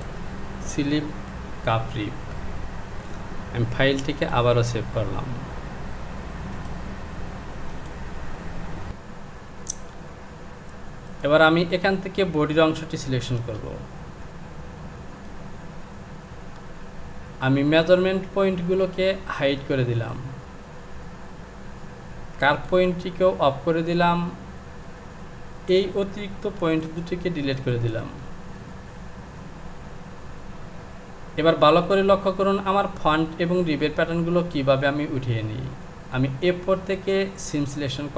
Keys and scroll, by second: 8.9 j, 13.6 Return, 26.6 Delete.